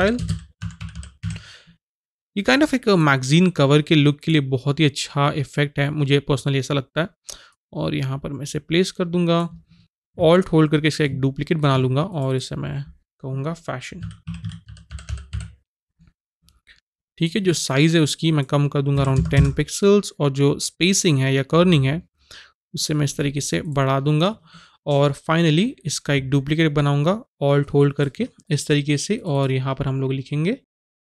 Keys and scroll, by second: 0.0-1.7 typing, 13.7-15.8 typing, 19.0 KP_1, 19.1 KP_0, 19.3 Return, 30.6-31.0 typing.